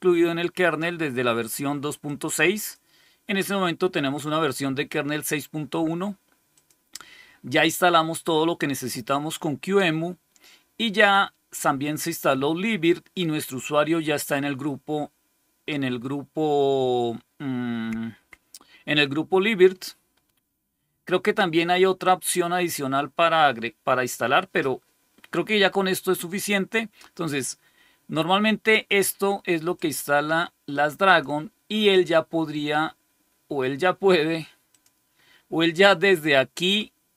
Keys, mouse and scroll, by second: 2.0 click, 6.4 click, 10.9 click, 28.6 click, 29.7 click, 31.0 click, 31.7 click, 32.4 click.